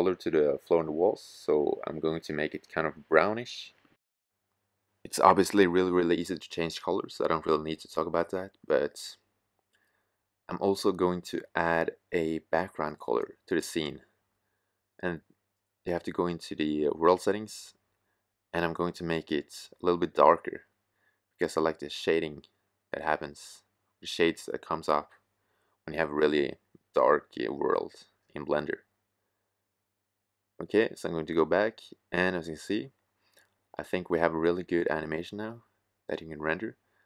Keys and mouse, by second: 4.1-5.5 middle drag, 5.6 middle click, 5.8 middle click, 5.9 middle click, 15.2-19.1 middle drag, 23.1-24.9 drag, 24.0 shift+f, 30.1-30.9 drag, 35.7-36.6 right drag, 36.6 shift+f.